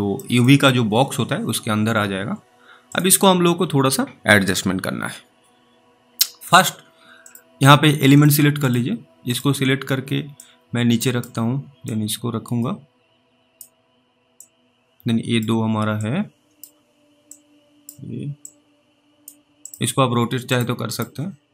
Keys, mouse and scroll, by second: 0.5 middle click, 2.9 click, 7.2 click, 8.7 double click, 9.3 click, 10.7 click, 12.2 click, 14.7 click, 16.3 click, 17.6 click, 18.7 click.